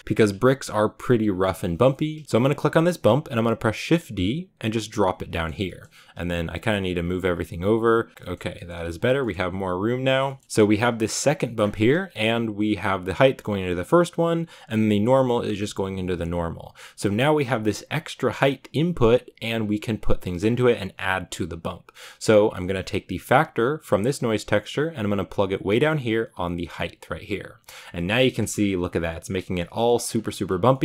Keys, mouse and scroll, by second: 2.3-3.7 right drag, 3.7 shift+d, 5.4 scroll down 5, 8.1-9.8 middle drag, 9.8-26.5 drag, 27.2-28.2 drag, 28.2 shift+middle click, 28.5 scroll up 4, 29.1-29.5 scroll down 3, 29.8 middle click, 30.0-30.8 scroll up 2.